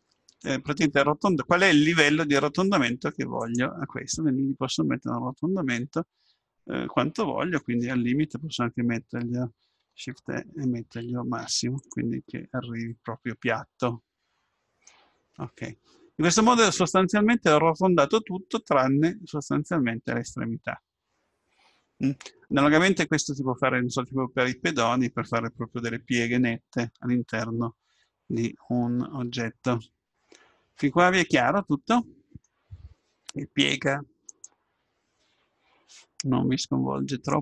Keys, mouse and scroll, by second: 4.0-6.0 middle drag, 10.2 shift+e, 12.4-14.2 middle drag, 15.2-18.2 middle drag, 28.0-29.9 middle drag, 33.2-36.4 middle drag.